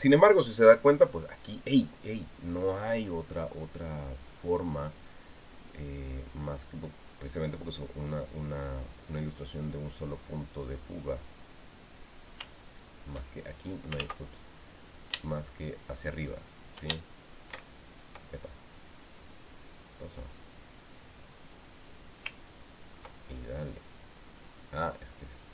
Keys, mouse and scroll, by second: 13.6 shift+click, 14.8 ctrl+z, 15.7 shift+click, 22.9 ctrl+click.